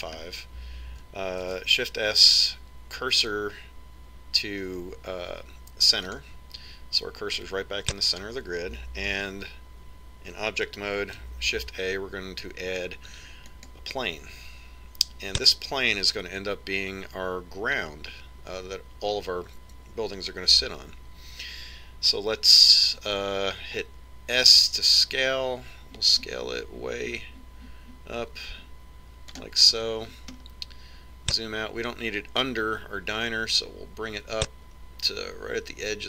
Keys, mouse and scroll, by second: 2.0-3.2 scroll down 1, 3.2 shift+s, 12.8 shift+a, 26.3 s, 31.9-34.2 middle drag, 34.3 click.